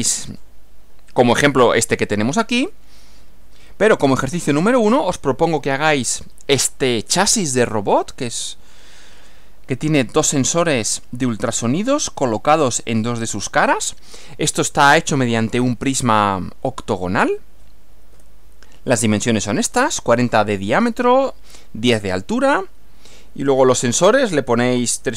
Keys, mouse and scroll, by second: 4.2 Right, 18.1 Right.